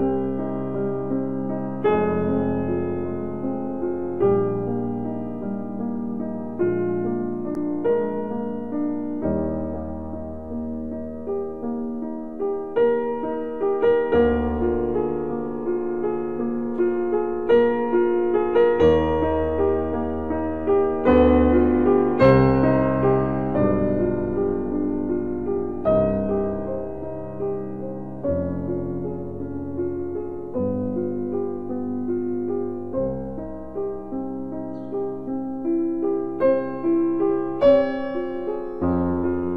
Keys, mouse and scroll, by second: 2.6 right click, 5.7 right click, 5.7 s, 8.6 z, 10.2 x, 22.3 click, 23.3-26.1 middle drag, 26.1-32.1 middle drag, 32.1 click, 32.7 a, 35.5 s, 38.8 s.